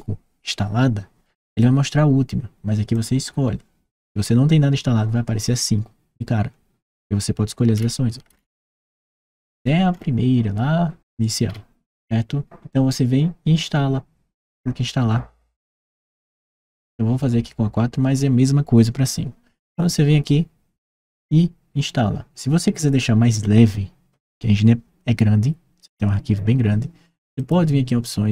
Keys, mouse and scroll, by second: 2.7 click, 7.5-8.0 scroll down 1, 8.0-8.9 scroll up 1, 8.9-9.8 scroll down 1, 11.2-11.5 scroll up 1, 16.0 click, 27.1 click, 28.1-28.3 scroll down 1.